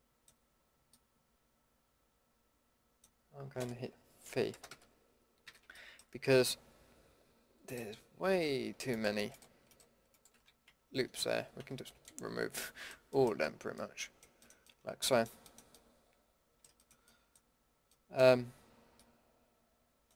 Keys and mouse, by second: 0.1 middle click, 3.2-4.2 middle drag, 4.2 v, 5.4 a, 8.2 a, 11.6 ctrl+x, 14.7 middle click.